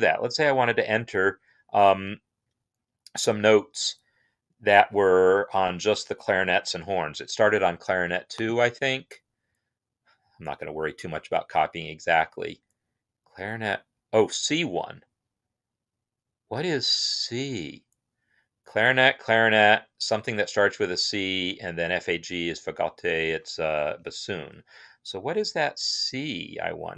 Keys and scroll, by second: 23.9 Home.